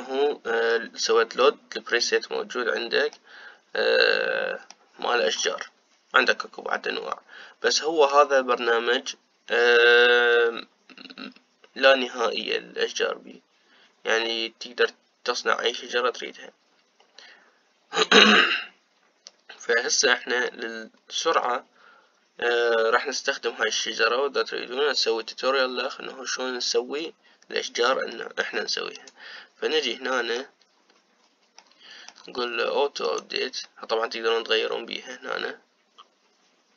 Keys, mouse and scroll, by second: 0.7-1.4 scroll down 2, 1.4-2.1 scroll up 2, 2.1-2.9 scroll up 1, 2.9-3.7 scroll up 1, 3.7 scroll down 1, 3.9-6.1 middle drag, 6.1-6.8 scroll down 1, 6.8-7.5 scroll down 1, 7.5-8.4 scroll down 1, 8.4-11.5 middle drag, 12.7-13.6 scroll up 2, 21.2-24.6 middle drag, 24.6 click, 28.8 middle click, 29.7 click, 30.8 middle click, 31.7-32.3 scroll up 3, 32.3-36.7 middle drag.